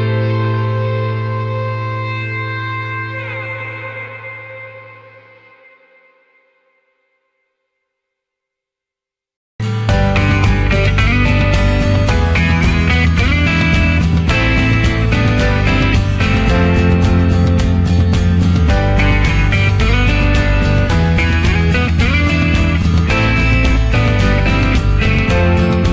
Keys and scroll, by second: 0.3 ctrl+z.